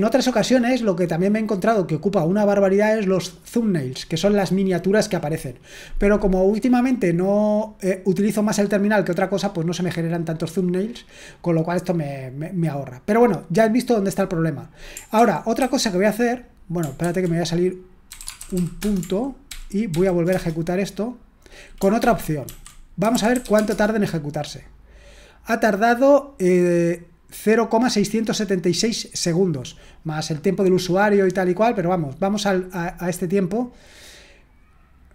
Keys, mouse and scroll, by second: 15.1 ctrl+p, 15.5 ctrl+a, 17.0 ctrl+c, 17.8-19.0 typing, 19.5 ctrl+p, 19.9 ctrl+p, 20.3 Return, 22.0 ctrl+p, 22.4 ctrl+a, 22.7-23.9 typing, 34.7-35.1 drag.